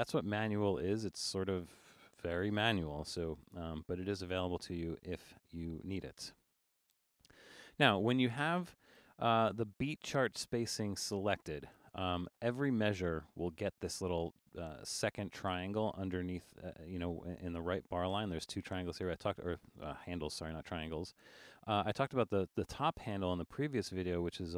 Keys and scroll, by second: 3.3 Return.